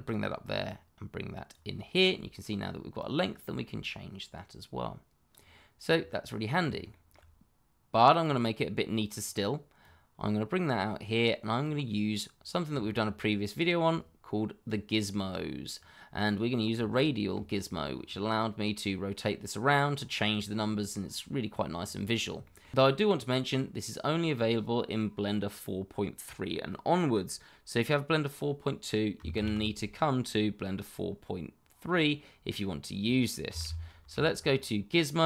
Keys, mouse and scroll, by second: 0.0 click, 5.9-6.6 scroll down 1, 6.8 shift+middle click, 6.9 middle click, 7.0 shift+middle click, 8.2 click, 12.3-12.7 scroll down 1, 12.8 shift+middle click, 13.1-13.7 scroll up 1, 14.6 click, 16.9 shift+middle click, 17.0 middle click, 17.0 shift+middle click, 17.5-18.0 scroll up 1, 21.8-22.2 scroll up 1, 22.4 shift+middle click, 22.4 middle click, 22.5 shift+middle click, 22.8 scroll down 1, 29.3 shift+a, 33.4 g, 33.6 i, 34.0 z.